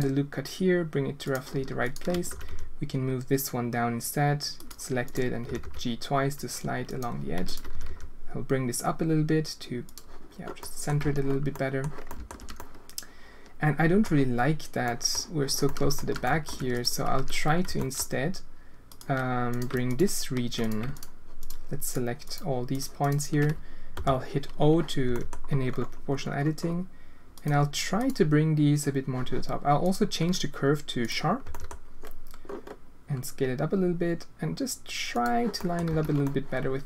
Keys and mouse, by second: 1.8 alt+click, 2.3 g, 7.3 alt+g, 10.6 click, 11.0 z, 11.5 click, 12.0 alt+shift+middle click, 12.5-14.0 middle drag, 14.8 middle click, 15.6 alt+shift+middle click, 16.2 alt+shift+click, 17.1 z, 17.6 g, 19.9 ctrl+drag, 21.8 ctrl+click, 22.3-23.0 ctrl+drag, 23.9 o, 25.0 g, 27.9-29.1 drag, 29.8-31.4 drag, 31.4 g, 35.5 click, 35.8 z, 36.2 click.